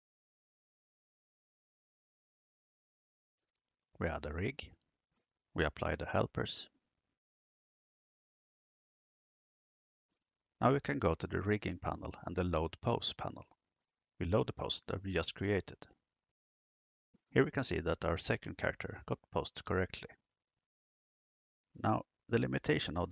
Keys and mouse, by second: 1.2 click, 3.1 drag, 3.7 click, 4.5 click, 5.7 drag, 9.9 click, 11.3 click, 15.1 click.